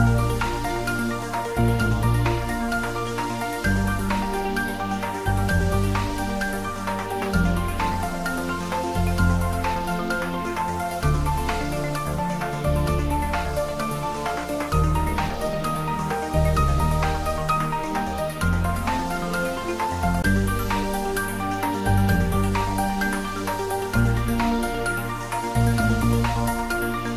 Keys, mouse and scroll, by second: 0.7 shift+z, 1.8 shift+d, 2.2 x, 9.5 click, 10.5-10.9 scroll down 1, 12.9 shift+d, 21.6 y, 26.6 click.